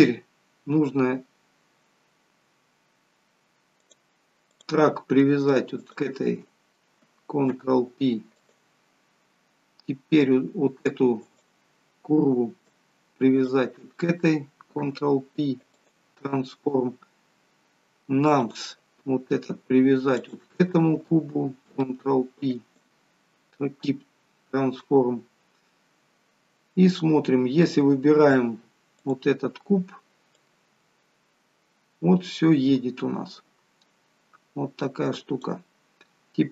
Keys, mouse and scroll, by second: 0.0 scroll up 2, 2.2-3.2 scroll down 1, 3.9 click, 4.5 click, 5.9 shift+click, 6.4 shift+click, 7.6 ctrl+p, 10.9 click, 11.3 click, 13.4 shift+click, 13.8 shift+click, 14.9 ctrl+p, 18.3 click, 19.2 scroll down 2, 20.2 shift+click, 21.8 ctrl+p, 24.2-25.4 scroll up 2, 25.4 scroll down 1, 29.1 click, 30.4 click.